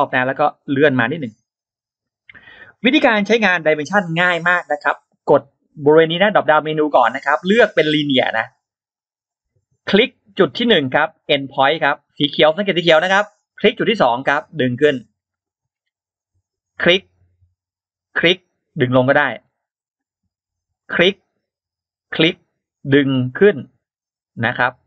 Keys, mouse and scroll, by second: 0.7-1.8 drag, 2.1 click, 2.6 middle click, 2.6-2.9 scroll up 1, 6.8 click, 8.5 click, 13.9 click, 14.8 click, 15.2 scroll down 2, 15.6 scroll up 2, 16.6 click, 18.0 click, 18.9 click, 19.2 scroll down 2, 19.6-19.9 scroll up 2, 20.6 click, 21.9 click, 24.4 click.